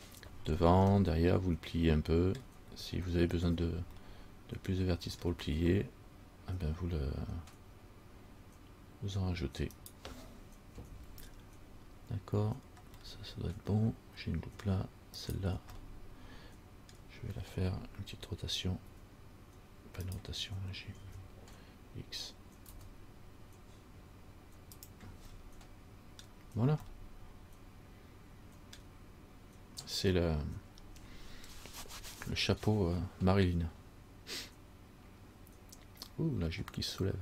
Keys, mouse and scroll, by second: 1.1 scroll up 1, 1.2 middle click, 2.5 scroll down 1, 3.7-4.3 scroll down 2, 4.3 middle click, 5.4-7.2 scroll down 1, 9.9 right click, 10.9 Tab, 13.3 middle click, 15.3 right click, 16.1 middle click, 19.0 r, 21.2 g, 25.6 middle click, 27.0 middle click.